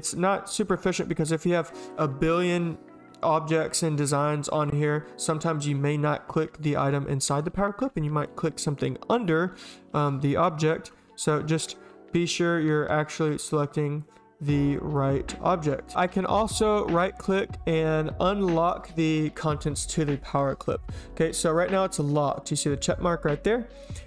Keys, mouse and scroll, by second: 10.3 space, 10.5 click, 13.7 click, 14.7 click, 23.8 click.